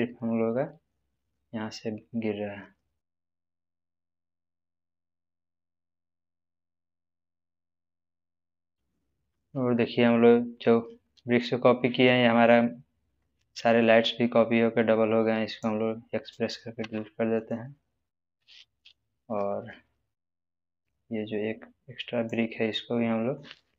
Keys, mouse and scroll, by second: 1.3-3.1 middle drag, 6.8-8.3 middle drag, 9.1 space, 9.7-10.4 scroll up 1, 10.4-11.0 scroll down 1, 11.0-11.6 middle click, 12.1 scroll up 1, 13.8-15.7 drag, 16.8 x, 17.4 click, 18.0-18.9 middle drag, 20.4-21.0 drag, 22.9-23.6 middle drag.